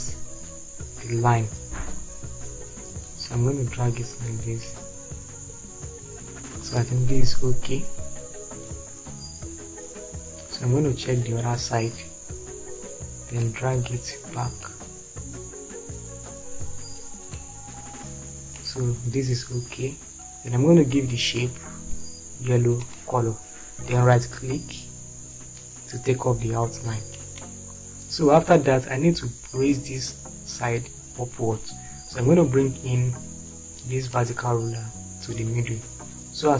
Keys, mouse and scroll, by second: 11.3 click.